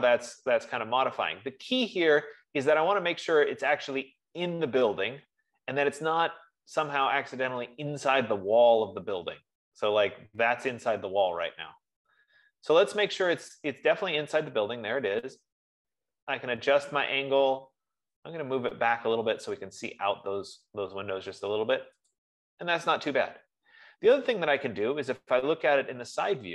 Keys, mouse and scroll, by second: 6.8 middle click, 6.8 scroll, 10.9 F15, 12.8 F15, 22.5 click, 25.0 scroll, 25.6-26.5 scroll.